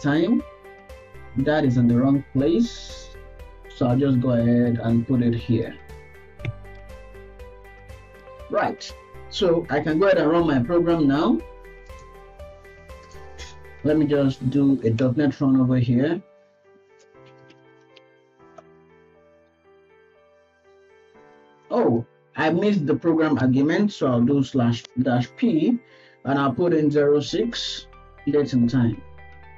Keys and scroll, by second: 1.4 shift+Left, 3.7 ctrl+x, 3.9 Left, 4.1 Left, 4.4 Right, 4.8 ctrl+v, 5.4 End, 6.9 ctrl+s.